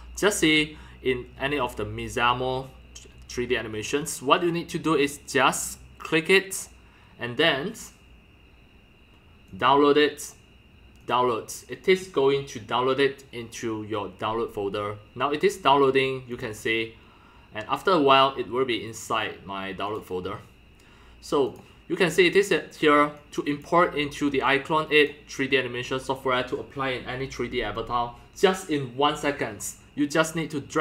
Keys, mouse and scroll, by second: 0.5-0.9 drag, 1.1 drag, 1.4-1.9 middle drag, 1.4-1.7 scroll, 1.9-2.6 scroll down 5, 1.9 middle drag, 2.6 middle drag, 2.6 scroll, 2.8-3.1 scroll down 2, 4.3-4.9 scroll down 6, 6.2 scroll down 6, 6.6-8.6 drag, 9.7 click, 11.0 click, 12.0 click, 12.8 click, 13.0 Escape, 14.4-16.2 drag, 16.4-17.0 drag, 19.0-19.8 drag, 20.2-21.6 drag, 21.6-22.0 drag, 23.3 click, 23.5 click, 24.5 click, 24.7 drag, 25.4-30.2 drag.